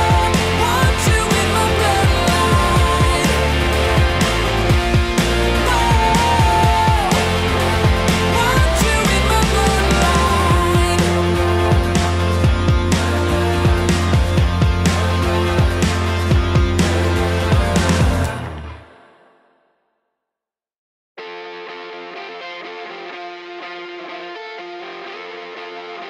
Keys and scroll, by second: 1.0 ctrl+z, 2.5 ctrl+z, 7.9 ctrl+z, 9.7 ctrl+z, 14.4 ctrl+z, 15.2 ctrl+z, 16.2 ctrl+z, 17.1 ctrl+z, 19.6 ctrl+z, 22.0 ctrl+z.